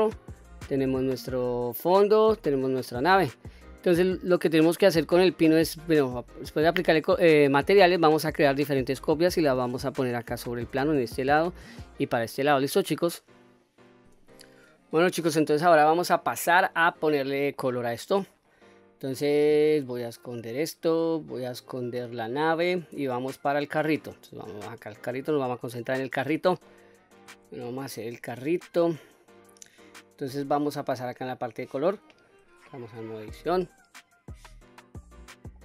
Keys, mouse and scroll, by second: 2.0 click, 2.6-3.0 scroll down 1, 3.0-3.9 middle drag, 4.3 middle click, 8.4 scroll down 1, 9.2-12.0 scroll down 1, 12.2-12.7 scroll up 2, 12.7-13.2 middle drag, 15.5 middle click, 16.3-17.2 scroll up 3, 17.3 shift+middle click, 18.2-18.7 scroll down 2, 18.7-20.3 scroll up 1, 20.3 click, 22.6 click, 24.3-24.9 scroll up 2, 24.9 click, 25.4-26.1 middle drag, 26.5-26.9 shift+middle drag, 27.2 scroll up 3, 27.9 scroll down 1, 28.4-29.1 shift+middle drag, 30.9 click, 32.7 Tab, 33.5-34.1 scroll up 3, 34.1-34.9 scroll down 1, 34.9-35.4 middle drag.